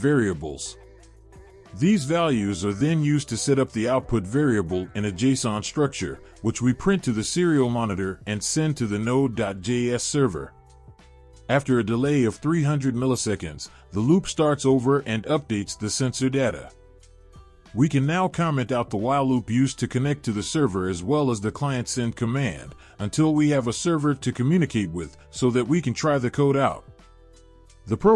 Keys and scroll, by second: 19.7-20.2 typing, 23.4-23.8 typing.